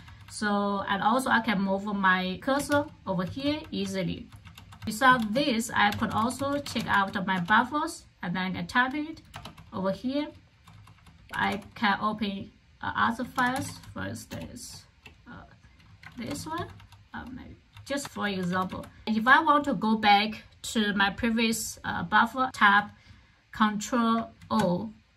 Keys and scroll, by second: 0.0-0.5 typing, 2.3-7.3 typing, 7.4 Return, 9.3 Return, 9.8-15.1 typing, 16.1 ctrl+[, 16.3-19.8 typing, 18.0 Return, 21.5 k, 24.4 ctrl+o.